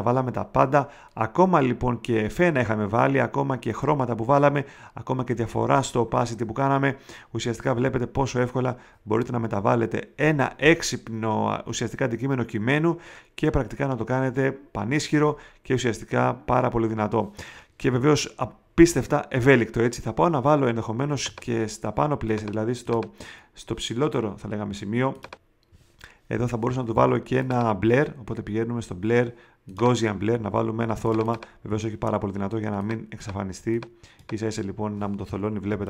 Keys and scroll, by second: 30.9 space, 31.7 super+space, 35.6 space.